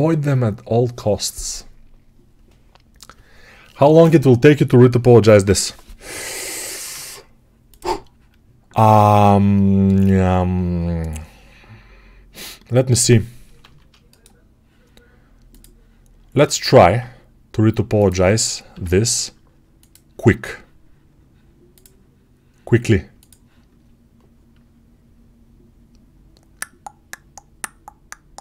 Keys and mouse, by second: 6.8 ctrl+Tab, 9.8-16.5 middle drag, 13.8 shift+d, 16.5-28.4 ctrl+drag, 17.5 ctrl+Tab, 18.6 n.